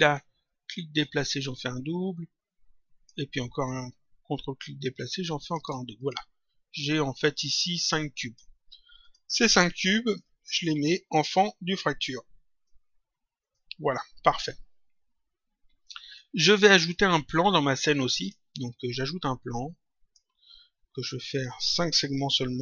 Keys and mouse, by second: 0.9 ctrl+click, 3.6 ctrl+click, 5.9 click, 7.1 click, 9.0 click, 10.0 shift+click, 11.2 click, 13.3 click, 16.0 click, 17.5 click, 18.9 click, 21.2 click, 22.5 click.